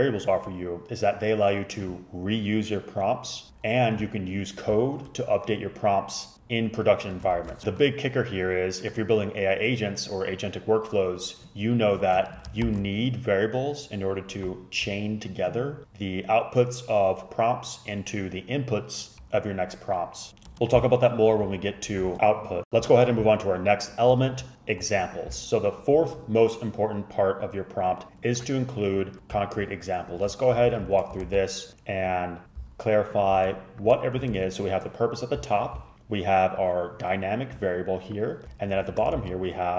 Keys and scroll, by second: 7.4 shift+super+Left, 12.7 shift+super+Left, 30.6 shift+Up, 30.8 shift+Up, 31.0 shift+Up, 31.3 ctrl+c, 34.4 ctrl+c, 38.9 shift+super+Down, 39.3 ctrl+c.